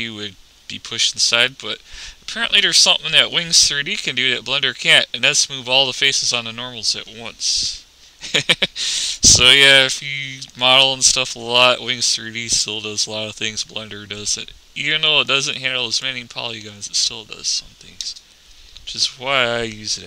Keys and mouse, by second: 5.0-8.9 middle drag, 9.0 s, 11.5-12.5 middle drag, 16.0-17.1 drag, 17.1 middle click, 18.3 KP_0.